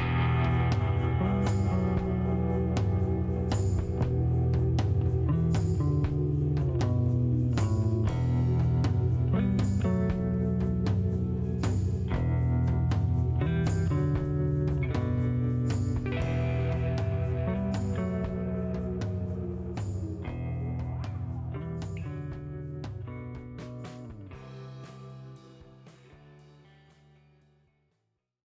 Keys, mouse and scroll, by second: 2.1 shift+right click, 6.5 shift+right click, 9.4 shift+scroll down 1, 9.9 middle click, 10.7 shift+right click, 14.9 shift+right click, 16.8 shift+right click, 18.6 shift+right click, 20.0-20.8 typing, 24.4 click.